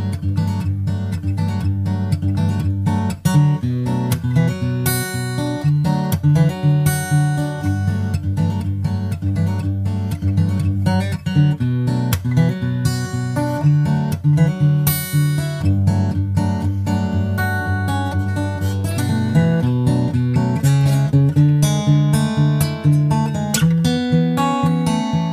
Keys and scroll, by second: 12.0 super+Right, 12.2 super+s, 16.8 super+Right, 17.0 super+s, 17.1 super+Tab, 17.7 super+Tab, 17.9 super+Tab, 18.9 super+Tab, 19.3 super+Tab, 19.5 super+Tab, 21.1 super+s, 23.9 super+s, 24.1 super+Tab, 24.6 super+Tab, 24.7 super+Tab.